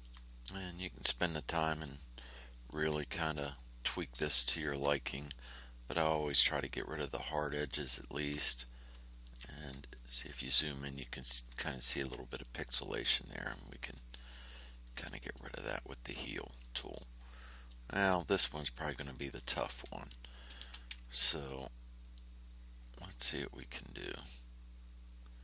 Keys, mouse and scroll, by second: 0.0 ctrl+click, 0.4-1.7 ctrl+drag, 2.6 ctrl+click, 3.2 ctrl+click, 4.2 space, 5.4 ctrl+scroll down 2, 6.5 ctrl+scroll up 2, 8.1 ctrl+click, 9.2 ctrl+click, 9.8 ctrl+scroll up 2, 11.9 ctrl+middle click, 12.4-14.0 ctrl+middle drag, 14.1 ctrl+scroll down 2, 15.0 ctrl+middle click, 16.0 ctrl+scroll down 2, 16.6 ctrl+middle click, 17.3 click, 18.2 ctrl+scroll up 2, 18.8 ctrl+scroll down 2, 20.5 r, 22.1-25.4 drag.